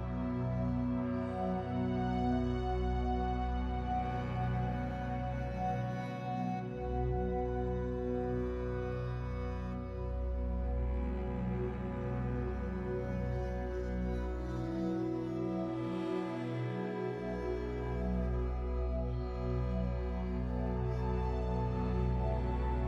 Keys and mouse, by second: 0.3-2.9 drag, 3.4-7.5 middle drag, 3.4 r, 4.0 r, 8.7 r, 8.7 g, 9.1 shift+d, 9.5 r, 10.5 shift+d, 11.0 r, 11.8 middle click, 12.6-14.4 drag, 12.6-16.5 typing, 16.2-17.9 drag, 17.6 shift+d, 17.9 shift+d, 18.2-20.6 middle drag, 18.4 r, 18.8 shift+d, 20.6 shift+d, 21.3 shift+d, 22.6-22.8 middle drag, 22.6 shift+d.